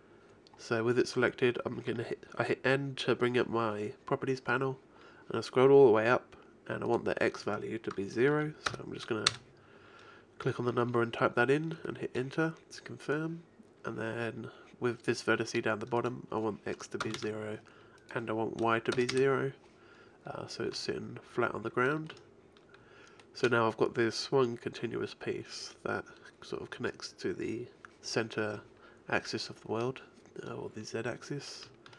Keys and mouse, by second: 6.7-7.9 middle drag, 7.9-9.2 drag, 13.1 click, 13.9-15.0 right drag, 16.0-20.7 drag, 20.7 a.